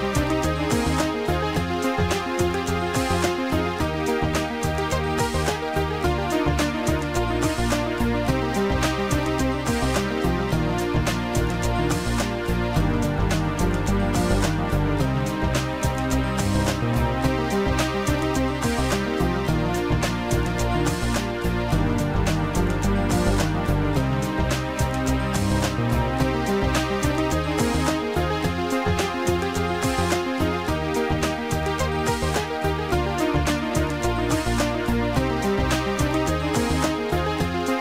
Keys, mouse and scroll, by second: 2.1 click, 4.7 click, 6.1 click, 9.7 click, 11.8 click, 13.3 shift+click, 14.9 shift+click, 15.5 click, 19.6 shift+click, 20.7 shift+click, 22.7 click, 24.4 right click, 27.1 click, 28.8 click, 29.9 shift+click, 31.3 click, 36.6 click.